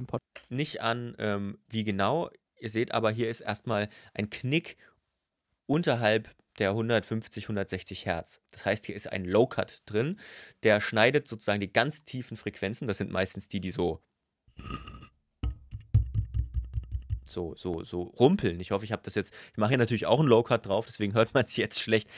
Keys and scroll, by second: 0.0 space.